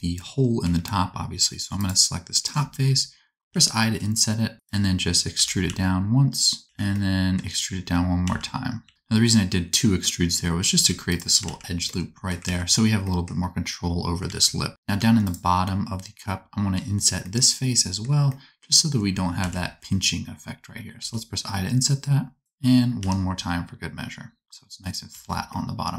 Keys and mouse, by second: 0.6 3, 1.7 middle click, 3.5 i, 5.3 e, 6.6 alt+z, 7.8 e, 8.9 alt+z, 10.7 1, 11.0 alt+middle click, 11.1-16.2 alt+drag, 11.5 alt+z, 12.5 alt+z, 14.2 alt+z, 14.8 3, 16.4-17.7 drag, 19.3 alt+z, 20.9 i, 23.0 i, 25.1 Tab.